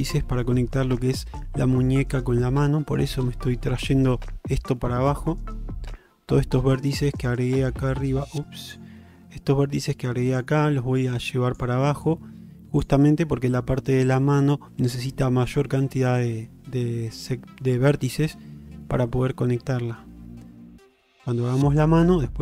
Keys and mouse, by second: 0.0 middle click, 2.6 middle click.